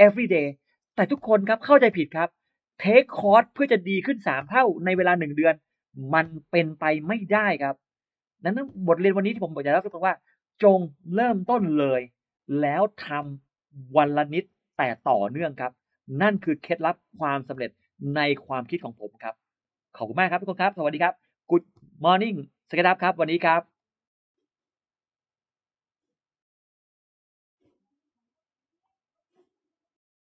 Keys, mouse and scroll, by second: 25.3 click, 26.6 click, 28.7 click.